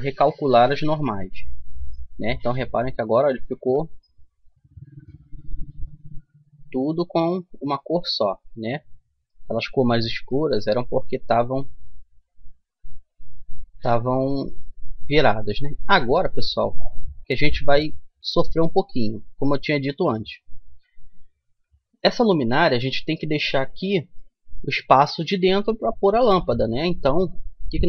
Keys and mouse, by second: 1.7 Tab, 2.5 Tab, 3.5 a, 4.2-7.0 middle drag, 10.1-12.8 middle drag, 15.1-18.5 middle drag, 23.3-27.8 middle drag.